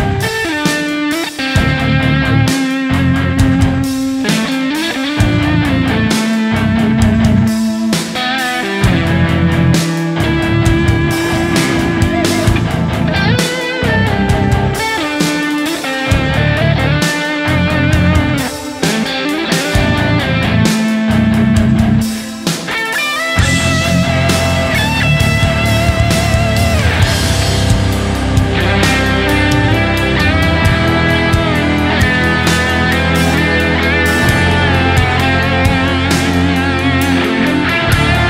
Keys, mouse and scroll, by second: 0.9 double click, 2.0 shift+double click, 2.1 shift+click, 2.3 shift+right click, 2.7 shift+right click, 5.1 double click, 5.4 shift+click, 6.3 shift+click, 7.0 shift+right click, 9.4 shift+click, 9.5 shift+double click, 9.6 shift+click, 10.2 scroll down 1, 10.9 double click, 11.8 right click, 12.5 alt+right click, 12.7-13.6 typing, 13.3 double click, 13.9 double click, 15.2 typing, 15.4 double click, 18.0 right click, 25.7-27.8 typing, 26.6 right click, 28.1 right click, 29.7 typing, 30.0 right click, 30.2 shift+click, 30.9 shift+right click, 31.2 shift+click, 31.6 alt+right click, 31.8 alt+right click, 32.0 shift+click, 32.1 shift+double click, 32.3 shift+click, 32.7 shift+right click, 33.0 ctrl+click, 33.3 alt+right click, 33.5 alt+right click, 33.8 shift+click, 33.9 shift+double click, 34.1 shift+click, 34.8 shift+click, 35.3 shift+right click, 35.6 shift+click, 35.8 shift+double click, 36.2 shift+right click, 37.3 ctrl+d, 37.8-38.1 typing.